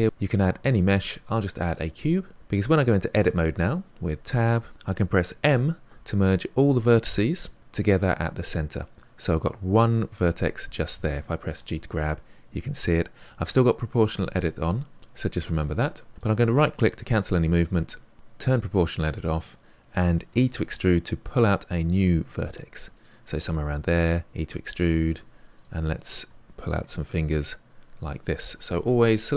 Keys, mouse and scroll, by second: 3.1 Tab, 5.4 m, 11.5 g, 18.1 middle click, 18.4 click, 20.2 e, 23.3 e, 25.1 e, 25.9 click, 26.1 e, 26.7 click, 26.9 e.